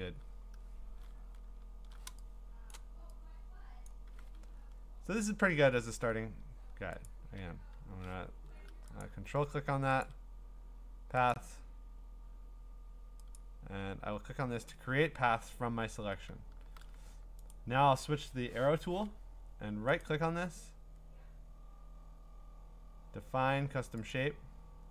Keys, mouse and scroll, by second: 1.2-2.1 scroll, 2.7 click, 3.9 click, 4.6 scroll, 4.7-5.0 scroll up 6, 5.2-5.6 scroll down 7, 6.5-7.1 scroll, 7.1 ctrl+click, 9.0 click, 9.3 ctrl+d, 10.0 ctrl+click, 11.3 click, 13.4 click, 14.7-15.8 ctrl+scroll, 16.6 a, 17.5 right click, 18.6 Escape, 20.0 right click, 21.6-23.1 right drag, 24.1-24.9 drag.